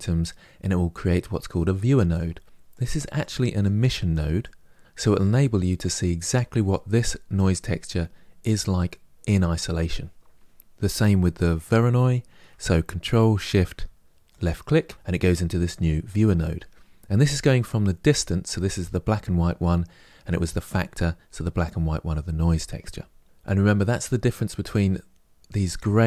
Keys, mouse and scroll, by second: 1.3 click, 2.5 click, 14.1 ctrl+shift+click.